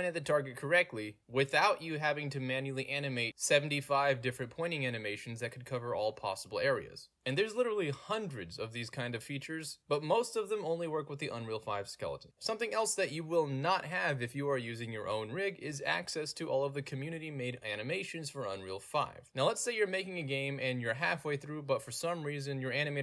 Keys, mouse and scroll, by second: 1.8 w, 2.0 d, 2.1 w, 3.3 d, 12.4-15.1 middle drag, 12.4 scroll up 2, 12.5-13.2 scroll down 2, 13.2-13.9 scroll down 1, 13.9-14.6 scroll down 1, 14.6-15.1 scroll down 1, 16.0 click, 17.0-20.0 middle drag, 17.0-17.7 scroll down 2, 17.7-19.0 scroll down 1, 19.0-19.8 scroll down 1, 19.8 scroll down 1, 20.0 click, 20.5 click, 20.8 middle click, 20.8 scroll down 2, 21.5 click, 21.7 middle click, 21.7 scroll down 2, 22.4 middle click, 22.4 scroll down 2, 22.7 click.